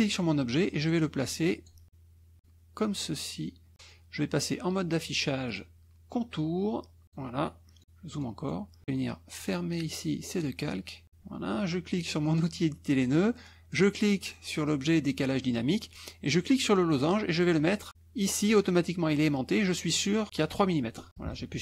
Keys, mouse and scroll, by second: 0.2-1.9 drag, 2.4-3.7 drag, 5.5 click, 7.1 click, 7.8 middle click, 8.2 middle click, 9.4 click, 10.3 click, 12.3 click, 13.7 click, 16.6-19.7 drag, 21.1 KP_Subtract.